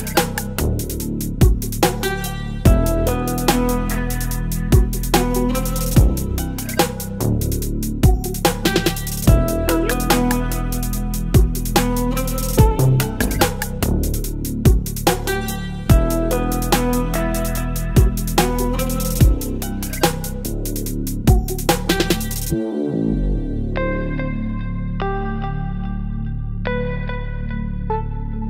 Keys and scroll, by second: 4.6 space, 6.0 ctrl+t, 10.8 Return, 11.7 space, 14.4 ctrl+j, 19.4 ctrl+t, 24.5 Return, 26.0 ctrl+t.